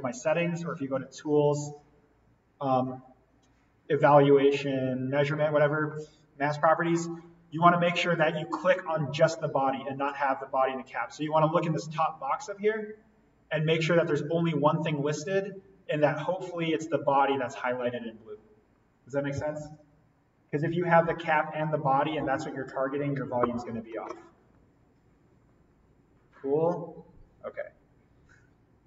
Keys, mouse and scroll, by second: 9.1 click.